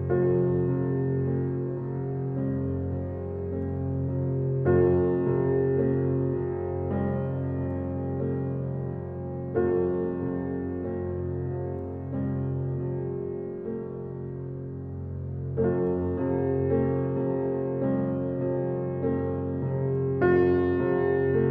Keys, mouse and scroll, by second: 1.4 s, 2.9 click, 3.3 scroll down 1, 3.8 alt+click, 4.1 alt+right click, 4.4-6.0 alt+drag, 8.8 right click, 9.4 alt+click, 10.2 alt+right click, 10.9 alt+click, 12.6 alt+right click, 12.9 alt+click, 14.2 alt+middle click, 14.7 alt+right click, 16.9 click, 19.7 click.